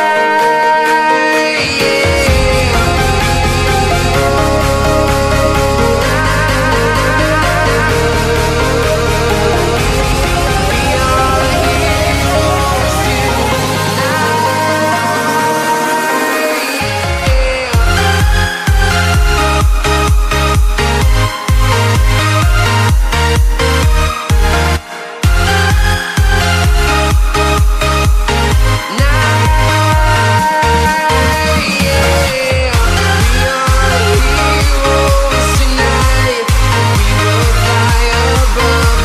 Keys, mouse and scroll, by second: 1.1 click, 4.9-6.2 typing, 7.8 click, 8.6 click, 9.6 Return, 10.2 click, 10.8-11.8 scroll up 1, 11.8 click, 15.3 Delete, 16.6 click, 17.9 click, 21.8-22.3 typing, 24.1 click, 24.5-25.3 typing, 26.5 Right, 29.3-29.8 alt+scroll up 3, 30.1 click, 31.2-32.4 typing, 34.3 click, 35.1 click, 36.8 Return.